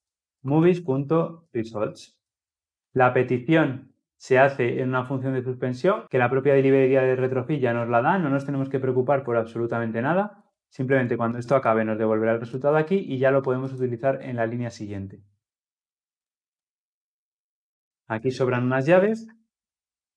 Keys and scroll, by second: 0.2 Return, 2.7 ctrl+alt+o, 18.5 ctrl+alt+l, 18.9 ctrl+alt+o.